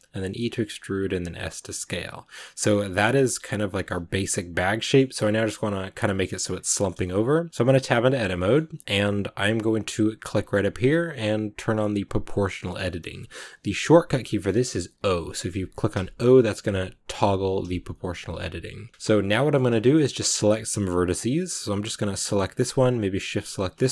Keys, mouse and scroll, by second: 2.2 scroll down 2, 2.7 shift+middle click, 3.0 Tab, 3.1 middle click, 3.9 scroll down 3, 4.0 middle click, 4.5 scroll up 2, 4.7-7.0 middle drag, 7.0 scroll up 1, 7.3 middle click, 7.5 Tab, 8.2-12.1 shift+middle drag, 12.1-15.4 drag, 15.4 o, 15.8-18.6 o, 18.9 o, 19.2-21.1 middle drag, 21.1-21.6 scroll up 1, 22.2-23.6 right drag, 23.6-23.9 middle drag.